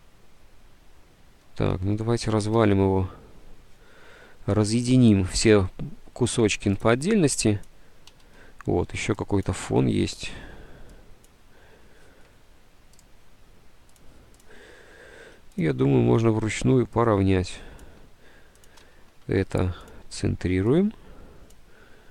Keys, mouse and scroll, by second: 2.7 k, 8.2 ctrl+z, 10.3 Delete, 18.8-19.7 typing.